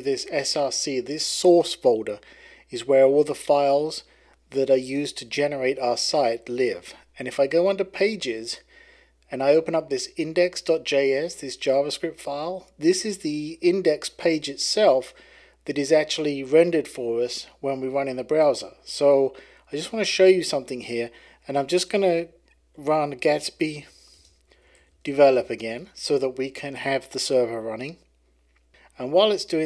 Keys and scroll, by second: 22.3-25.8 typing.